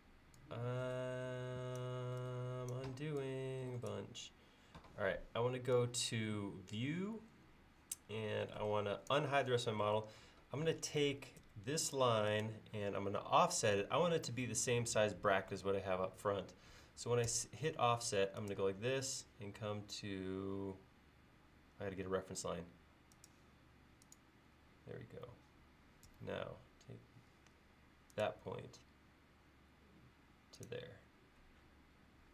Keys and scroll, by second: 11.4 space, 17.4 f, 22.0 l, 24.7 l, 26.2 f.